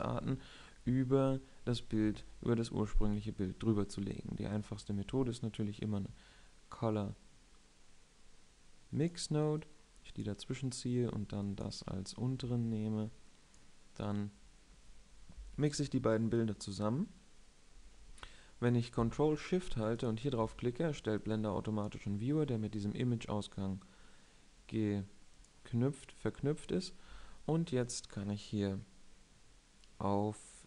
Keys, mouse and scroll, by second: 10.4 click, 11.0 click, 26.0-27.8 drag.